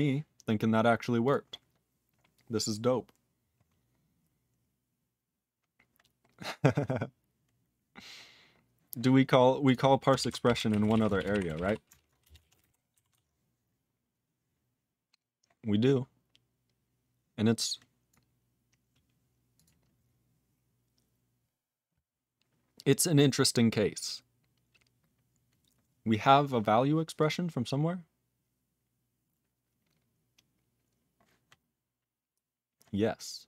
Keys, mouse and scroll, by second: 0.3 click, 1.2 click, 1.3 click, 4.0-5.0 scroll up 4, 5.0-6.2 scroll down 13, 6.3-8.5 scroll down 13, 8.9-9.3 scroll up 22, 9.6 click, 9.7 click, 10.2 ctrl+s, 10.2-12.1 typing, 12.2 Return, 12.4 ctrl+a, 12.5 ctrl+space, 12.5 ctrl+e, 12.6 ctrl+g, 13.1 ctrl+s, 14.9 scroll down 2, 15.9-17.5 scroll down 3, 17.5 click, 18.1 click, 19.6 click, 19.6 click, 20.2 click, 27.2 click, 27.2 click, 28.3-28.9 scroll up 4, 29.5-31.0 scroll up 3, 31.0 scroll up 2, 32.9-33.4 scroll up 3.